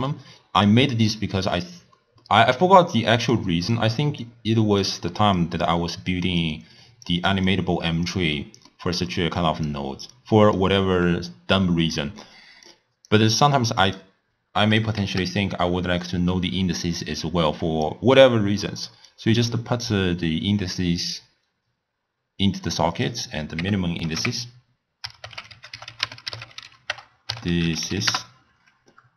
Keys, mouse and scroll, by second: 2.2-3.4 middle drag, 3.4 click, 4.3 click, 5.4 click, 6.4 click, 7.5 click, 8.3 scroll up 1, 8.4-9.1 middle drag, 9.1 click, 10.1 click, 12.7 click, 14.0-15.2 drag, 15.2 shift+d, 17.0 click, 19.1 drag, 22.9-26.0 drag.